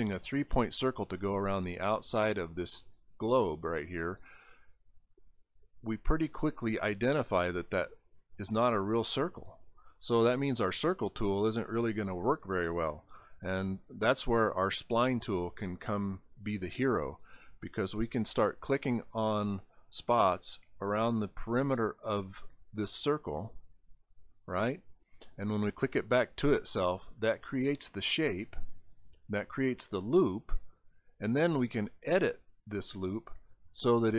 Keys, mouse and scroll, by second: 2.0 click, 16.3 click, 18.3 click, 19.8 click, 21.2 click, 22.7 click, 24.2 click, 26.3 click, 31.0 click, 32.8 click, 33.7 scroll up 1.